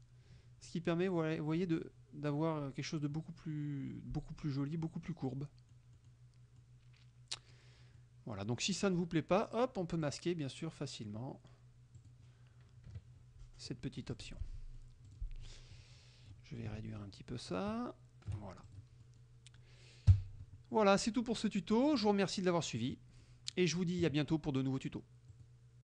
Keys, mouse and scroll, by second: 5.5 click, 6.2 click, 6.7-7.8 drag, 8.1 click, 10.1 click, 12.1 click, 13.0 KP_Subtract, 14.1 F1, 14.2 click, 14.6 click, 15.1 click, 15.8 click, 17.6 ctrl+shift+click, 18.7 ctrl+shift+click, 19.1 ctrl+shift+click, 20.1 KP_5, 22.1 click, 22.9 click, 23.3 click, 25.4 click, 25.9 click.